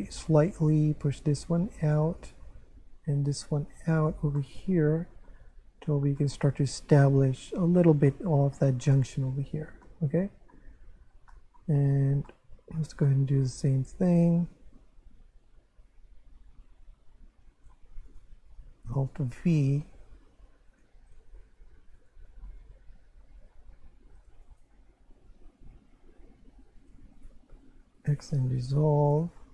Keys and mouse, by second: 0.7 right click, 1.4 click, 2.2 right click, 2.9 click, 4.4 middle click, 5.5 Tab, 6.2 middle click, 8.1 shift+middle click, 10.9 Tab, 11.3 shift+middle click, 18.1 right click, 19.4 alt+v, 20.7 click, 22.0 Tab, 23.7 Tab, 24.4 right click, 26.2 g, 26.8 click, 27.2 shift+right click, 28.0 x, 28.3 click, 29.0 Tab.